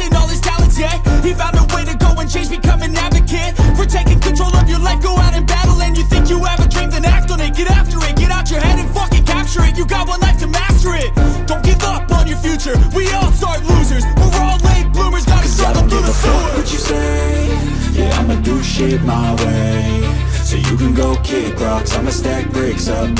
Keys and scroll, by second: 3.7 [, 3.9 [, 4.2 [, 4.4 [, 6.0 ], 6.2 ], 8.0 ], 8.2 ], 8.3 ], 11.1 typing, 13.6-15.3 typing, 19.3-20.8 typing.